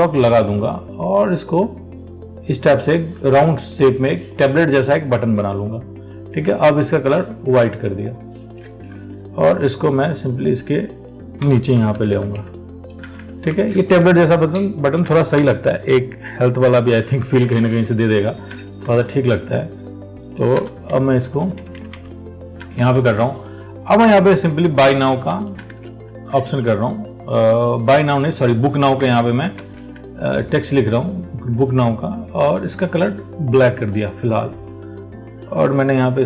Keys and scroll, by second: 9.1 ctrl+t, 13.7 ctrl+t, 19.1 ctrl+t, 23.2 alt+Tab, 25.5 ctrl+c, 25.9 alt+Tab, 29.2 ctrl+v, 29.8 ctrl+a.